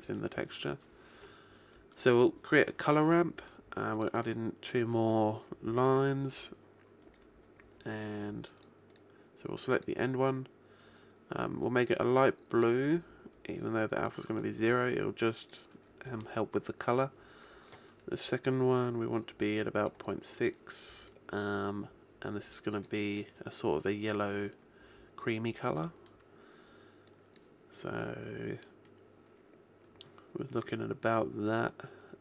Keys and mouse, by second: 2.0 click, 4.6-7.0 drag, 7.0-8.2 middle drag, 8.2 click, 8.6 middle click, 8.9-11.6 drag, 15.5 click, 18.6 click, 22.8 click.